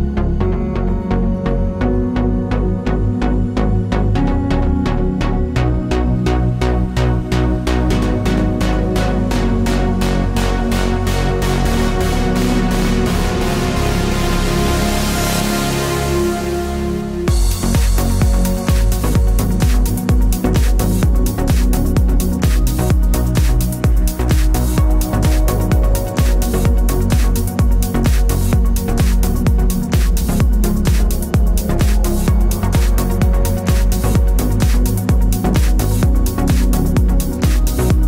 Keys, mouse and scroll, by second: 0.2 click, 0.5 h, 1.1-2.0 middle drag, 2.0 click, 2.1-4.9 middle drag, 4.9 shift+click, 7.4 ctrl+j, 7.4-18.7 drag, 18.7-22.8 middle drag, 19.1 ctrl+j, 22.8 click, 23.5 ctrl+j, 23.7-35.7 middle drag, 27.0 scroll down 1, 27.1 scroll up 1, 31.2 Tab, 32.7 o, 35.7 click, 35.8 middle click, 36.5 click, 36.9 g, 37.8 click.